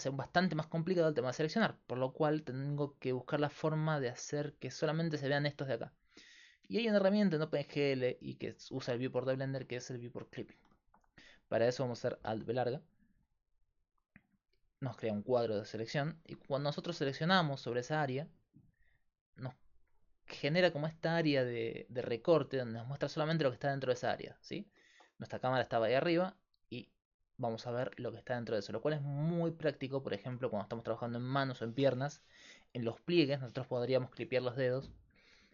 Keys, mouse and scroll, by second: 0.0 middle click, 12.3 alt+b, 19.6-28.4 middle drag.